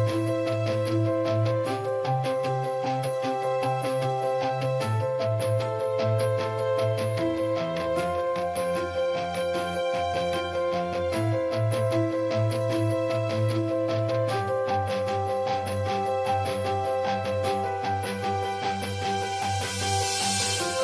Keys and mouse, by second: 0.2-1.6 drag, 1.2 ctrl+s, 1.6-2.2 middle drag, 2.2-3.7 drag, 3.7-4.0 middle drag, 4.0-5.5 drag, 5.5 middle click, 5.7 ctrl+s, 6.4-8.4 middle drag, 8.5-10.1 middle drag, 10.1 ctrl+s, 10.1 drag, 10.2 middle drag, 11.1-12.2 drag, 12.2 middle click, 12.6-13.7 drag, 13.7-14.1 middle drag, 14.1-15.1 drag, 15.1 middle drag, 15.3-16.5 drag, 16.5-18.2 middle drag, 18.2-19.5 drag, 19.5 middle click, 19.5 click, 20.4 ctrl+s.